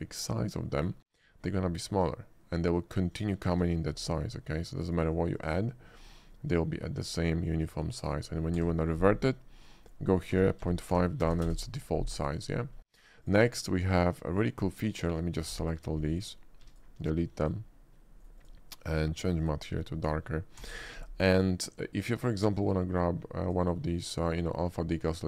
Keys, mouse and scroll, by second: 0.0 click, 0.8 click, 3.2 click, 3.6 d, 5.0 click, 5.3 click, 6.0 click, 8.1 click, 8.8 d, 9.6 click, 10.3 0, 11.2 6, 11.3 BackSpace, 11.4 5, 11.5 Return, 13.3 click, 13.6 shift+middle click, 15.0 shift+click, 15.6 d, 16.1 click, 16.7 x, 16.7 click, 17.5 click, 18.2 right click, 18.5 click, 18.9 click, 19.5 click, 20.1 click, 20.9 d, 22.7 click, 23.5 click.